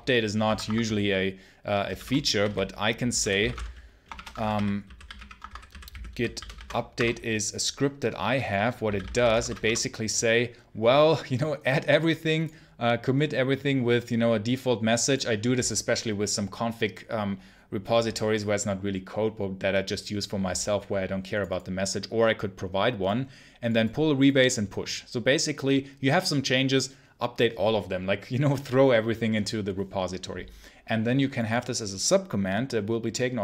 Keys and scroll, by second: 0.3 Escape, 0.6 Escape, 1.8-7.0 typing, 8.5-9.5 typing, 9.5 Return.